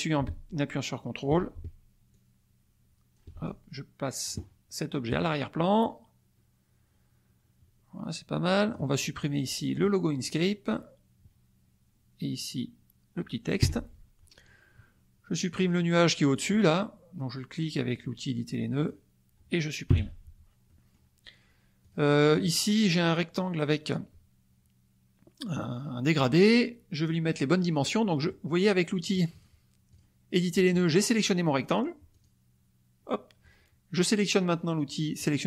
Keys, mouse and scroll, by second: 2.1-3.3 ctrl+drag, 3.4-4.4 ctrl+drag, 5.1 click, 5.9-8.9 drag, 9.2 click, 10.2 click, 13.6 Delete, 15.5 click, 16.3 click, 18.7 click, 19.9 Delete, 20.6 middle click, 21.8 click, 22.3 click, 29.0 click, 29.9 click, 30.9 click, 32.1 click.